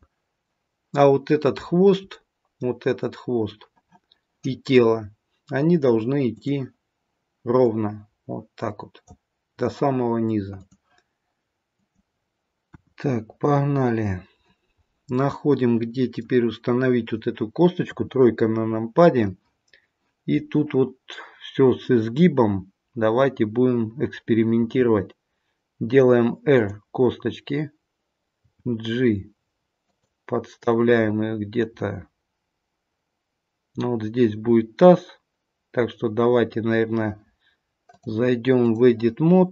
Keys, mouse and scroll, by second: 0.4 middle click, 1.5-3.4 scroll down 3, 2.0 middle click, 12.1 middle click, 12.1-12.6 scroll up 3, 12.6 KP_1, 13.3-14.1 scroll down 1, 14.1-14.5 scroll down 1, 14.8 middle click, 17.8 KP_3, 24.6 r, 28.3 g, 37.8 click.